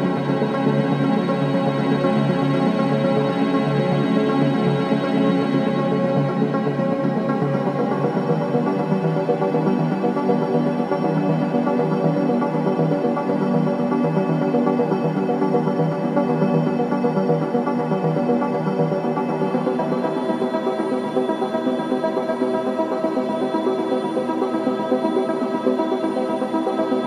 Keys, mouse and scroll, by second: 0.5-2.3 drag, 2.3 scroll down 1, 3.3 typing, 7.0 click, 10.4 click, 13.3-13.6 scroll up 1, 13.3 typing, 14.9 scroll down 1, 15.4 click, 15.6-16.0 scroll down 1, 17.2-17.6 scroll up 1, 20.2-21.2 typing, 26.0 scroll up 1.